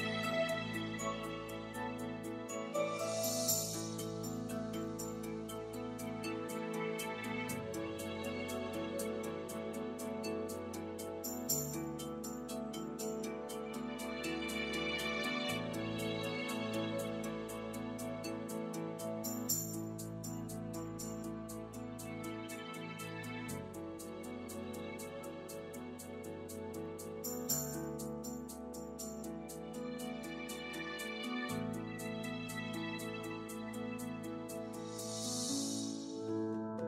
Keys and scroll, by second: 3.7 shift+super+z.